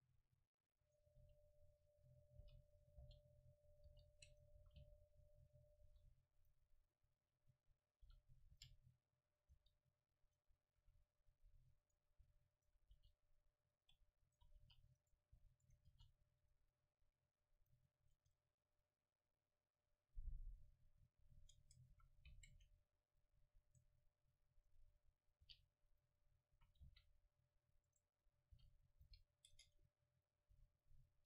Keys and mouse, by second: 0.8-2.5 right drag, 1.2 KP_1, 2.4 e, 2.5 click, 3.1 g, 3.8-8.5 drag, 3.9 r, 4.7 s, 5.9 s, 7.1 right click, 8.1 e, 8.5 middle click, 8.6 g, 9.5 r, 10.4-13.8 drag, 10.8 a, 12.6-18.2 right drag, 13.0 r, 13.9-15.9 drag, 14.6 r, 15.9 r, 16.5-18.8 drag, 18.2 Tab, 20.8 middle click, 21.6 Tab, 21.9 a, 22.5 c, 23.8-27.9 drag, 25.1 middle click, 25.5 r, 26.7 a, 26.9 c, 28.0 click, 28.6 r, 29.0 g, 29.5 Tab, 30.6 a.